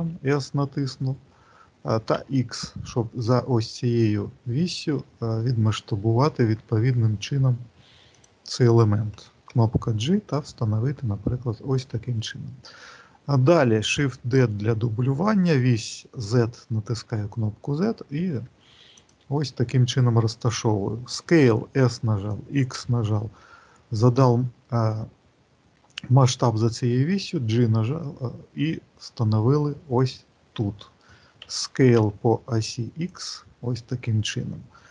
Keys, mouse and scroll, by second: 14.5 shift+d.